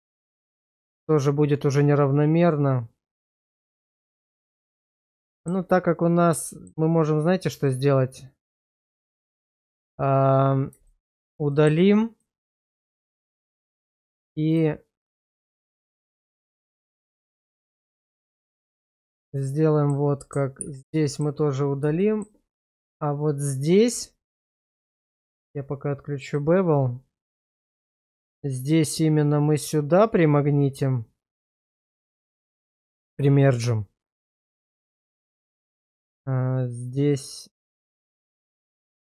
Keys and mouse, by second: 3.3-4.8 middle drag, 5.3 shift+middle click, 6.5 shift+middle click, 7.0-9.8 middle drag, 10.9 shift+middle click, 11.5 shift+middle click, 12.2 middle click, 12.6 shift+middle click, 13.3 shift+middle click, 14.5 shift+click, 16.2 shift+click, 17.0 middle click, 18.0 shift+middle click, 18.6-19.9 shift+middle drag, 20.6 ctrl+x, 21.0 shift+middle click, 22.0 shift+middle click, 23.9 Tab, 26.3 click, 27.7 click, 28.5 shift+click, 35.0 1, 35.8 click, 38.9 shift+click.